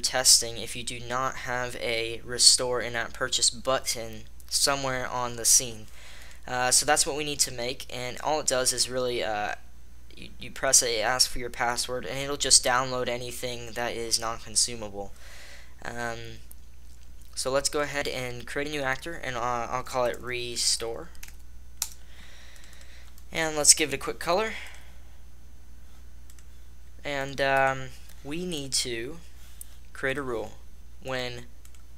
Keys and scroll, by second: 22.1 Return.